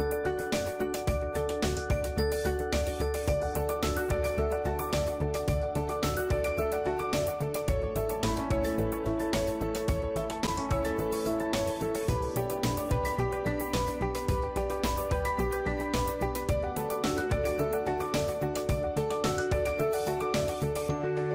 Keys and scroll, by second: 4.8 ctrl+a, 5.9 ctrl+d, 15.2 ctrl+a, 18.8 ctrl+v, 19.4 ctrl+t, 20.1 Escape.